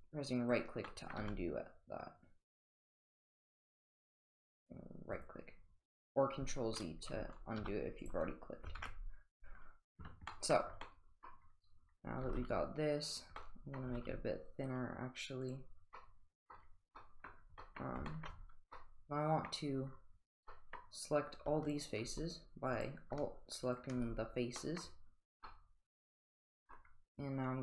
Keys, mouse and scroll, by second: 0.9 middle drag, 1.2 g, 7.6 g, 8.8 ctrl+z, 10.3 middle drag, 10.8-11.3 middle drag, 12.2 g, 13.4-13.7 middle drag, 13.8 middle click, 15.8 g, 15.9-16.5 middle drag, 16.9 middle drag, 17.6 middle drag, 18.1 shift+middle drag, 18.7-19.5 middle drag, 20.5 middle click, 22.7 click, 24.6 middle drag, 25.4-26.7 middle drag.